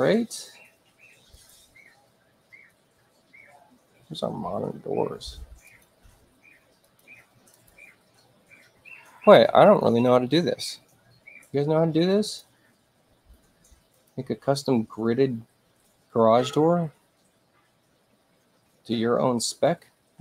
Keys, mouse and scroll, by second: 1.3 click, 5.6 click, 6.8 click, 7.5 click, 9.7 click, 12.2 click, 13.9 click.